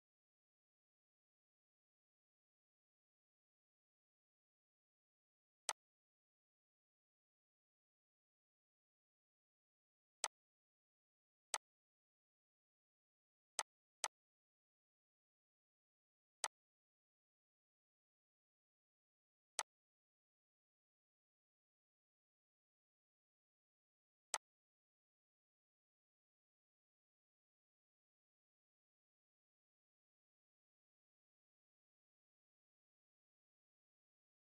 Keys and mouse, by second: 0.5 Right, 1.7 Up, 2.4 Down, 5.3 click, 9.9-19.2 drag, 24.0 click, 26.0 Right, 27.2 Up, 28.8 Left, 32.6 Right, 33.3 Left, 34.1 Right, 34.3 Left.